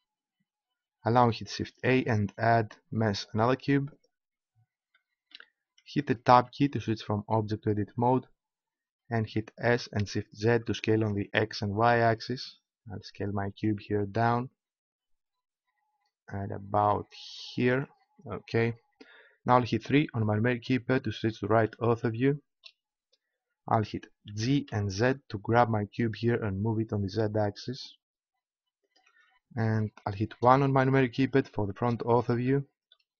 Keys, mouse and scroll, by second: 1.8 shift+a, 7.8 Tab, 9.6 s, 15.5-16.8 middle drag, 17.7-19.5 drag, 19.8 KP_3, 23.2-24.8 drag, 24.3 g, 28.9-30.2 drag, 30.3 KP_1.